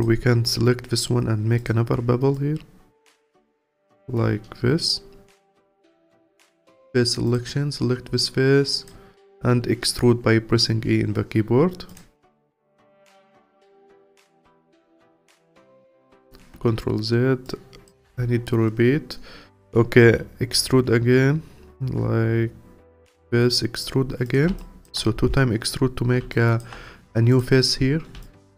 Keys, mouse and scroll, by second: 1.6 click, 5.4 3, 5.8-6.5 drag, 7.3 click, 7.8-8.2 scroll down 2, 8.2-9.5 alt+drag, 9.5 e, 12.2-12.5 scroll down 4, 12.5-14.1 alt+drag, 14.1-14.8 scroll up 1, 14.8 click, 15.8 ctrl+z, 16.0 ctrl+z, 17.4 click, 18.1 ctrl+z, 20.0 e, 23.3 e, 24.6 alt+click, 25.1-26.3 scroll up 3, 26.3-27.4 alt+drag, 27.9 scroll down 1, 28.2-28.5 alt+drag.